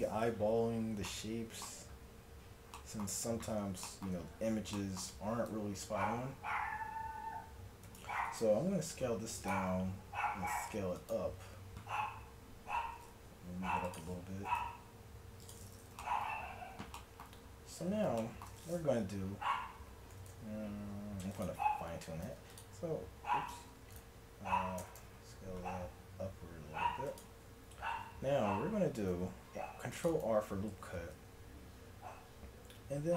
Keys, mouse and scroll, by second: 6.0 Tab, 7.1 s, 8.2 s, 9.9 s, 13.2 g, 14.4 s, 20.1-22.3 middle drag, 20.2 s, 22.3 ctrl+r, 23.6 ctrl+z, 24.8 s, 28.0 a, 29.1 ctrl+r, 30.8 ctrl+b.